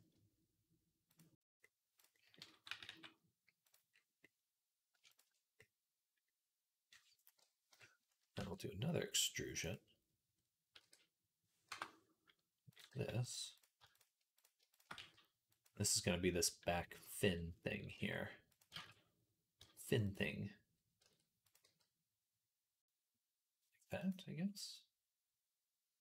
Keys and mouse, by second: 1.8-7.5 middle drag, 2.5 g, 7.5 KP_3, 8.2 e, 10.6 r, 12.7 g, 14.8 g, 15.6-17.2 middle drag, 17.2-18.5 drag, 18.6 ctrl+z, 19.4 g, 20.1-26.0 drag, 20.9 r, 21.5 g.